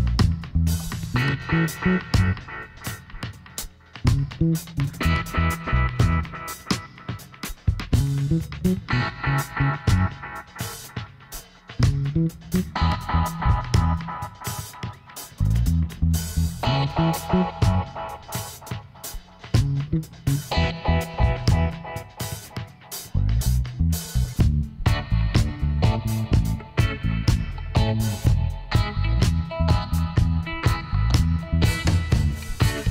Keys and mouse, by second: 0.8-5.3 middle drag, 1.8 Tab, 2.2 a, 3.2 Tab, 3.7 a, 4.1 a, 6.8 ctrl+n, 8.0 Tab, 9.4-11.0 drag, 10.7 t, 12.0-13.1 drag, 12.9 t, 13.1 middle click, 13.7 click, 15.4 a, 17.8 Tab, 21.5 ctrl+r, 25.3 ctrl+z, 26.0-28.8 middle drag, 29.1 click, 29.7-30.7 middle drag, 30.7 click, 31.3-32.9 right drag, 32.8 click.